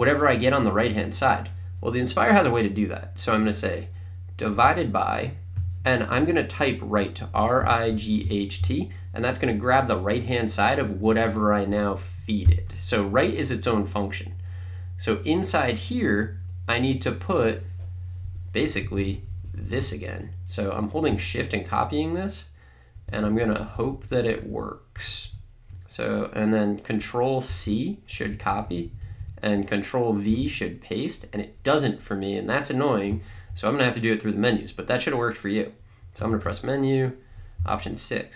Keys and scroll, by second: 4.6 /, 7.1-9.1 typing, 12.4 (, 18.3 Up, 18.6 Right, 27.9 c, 28.2 Right, 30.7 v, 36.2 Menu, 37.7 6.